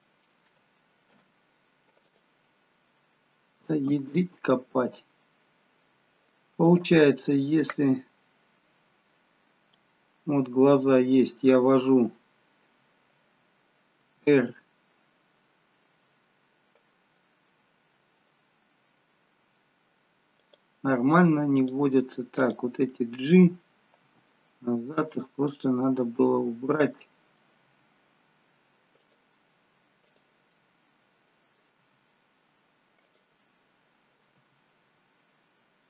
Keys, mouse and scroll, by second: 1.2 ctrl+p, 5.4 ctrl+z, 6.8 click, 9.5 scroll up 1, 9.8 middle click, 14.3 r, 21.7 click, 22.5 click, 24.2 g, 25.5 middle click, 27.7 g, 30.1 click, 30.6 middle click, 31.9 g, 33.4 middle click, 34.5 g.